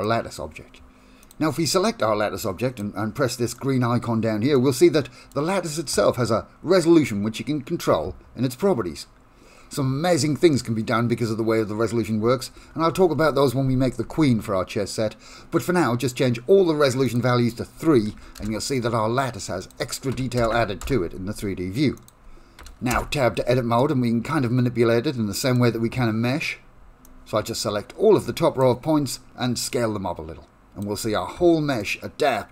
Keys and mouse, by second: 1.7 shift+middle click, 2.2 middle click, 4.6 middle click, 17.3-18.9 drag, 19.7-21.6 drag, 22.2 click, 23.4 Tab, 23.9-25.6 middle drag, 27.2-28.7 drag, 29.0 s, 31.9 middle click.